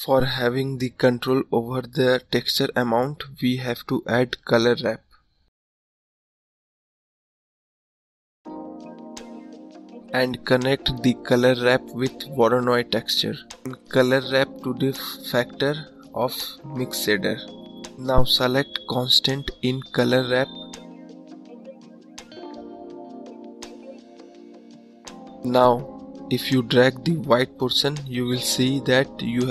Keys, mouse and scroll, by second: 2.0-2.5 scroll up 2, 13.3-17.9 middle drag, 17.9 click, 19.5-20.3 scroll up 5, 22.0-24.0 drag, 26.8-29.2 drag.